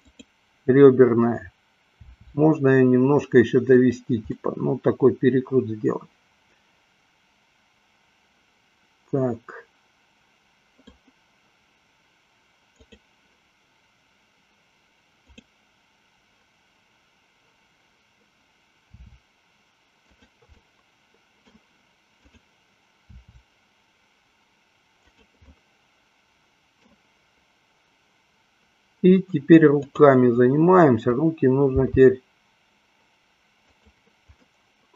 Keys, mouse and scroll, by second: 0.3-1.6 drag, 2.2 r, 4.6-11.2 middle drag, 12.7-13.8 drag, 15.3 click, 18.8 r, 20.5 click, 20.8 middle click, 22.3 click, 23.3 r, 25.7-27.2 middle drag, 29.7 click, 31.8 g, 34.6-34.9 middle drag.